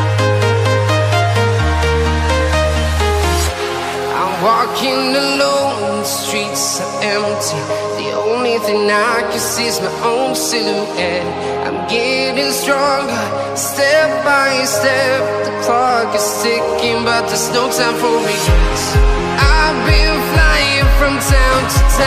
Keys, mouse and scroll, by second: 0.2 right click, 0.9 click, 4.8 alt+scroll up 1, 6.4 click, 6.9 scroll up 1, 8.9 click, 18.9 click, 19.4-20.0 scroll down 1.